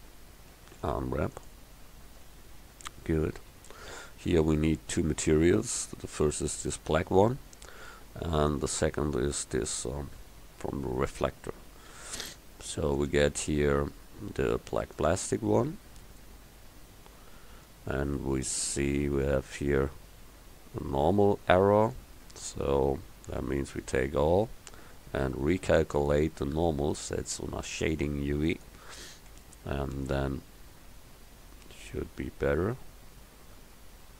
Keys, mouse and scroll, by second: 0.8 u, 2.3 Tab, 5.7 KP_1, 22.4 Tab, 23.5 a, 23.8 a, 29.4 Tab.